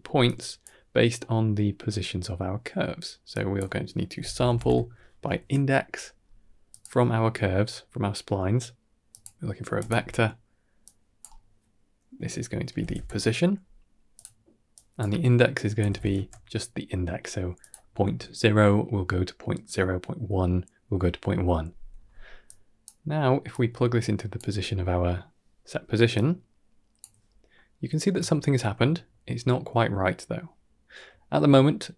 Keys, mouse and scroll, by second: 0.1 click, 1.1-1.5 middle drag, 3.2-6.7 drag, 8.4 middle drag, 9.2-9.7 drag, 10.7-14.1 drag, 14.9-17.6 drag, 22.3 click, 23.4-24.2 drag, 26.0 click, 27.4-27.9 middle drag, 28.2 shift+middle drag, 30.9 middle click, 31.5 ctrl+middle click.